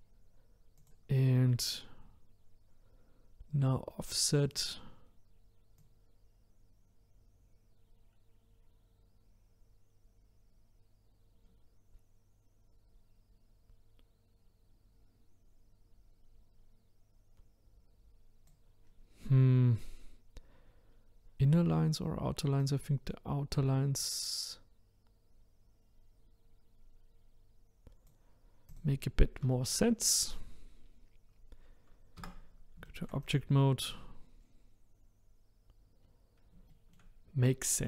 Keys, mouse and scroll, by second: 0.8 click, 4.5-8.8 drag, 18.9-20.0 scroll up 5, 20.0-20.3 scroll down 2, 22.6-25.6 drag, 28.7 click, 29.5 shift+middle click, 30.3-30.7 scroll down 2, 30.7-32.2 scroll up 1, 32.2 Tab, 32.9-33.2 shift+middle drag, 33.2 click, 33.6 scroll down 1, 34.4-35.7 scroll up 4, 36.0-36.7 scroll down 2, 36.7-37.8 shift+middle drag.